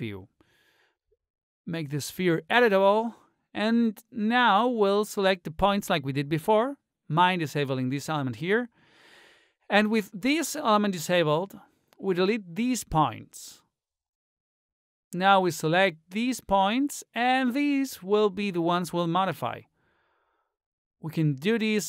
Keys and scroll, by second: 13.0 Delete.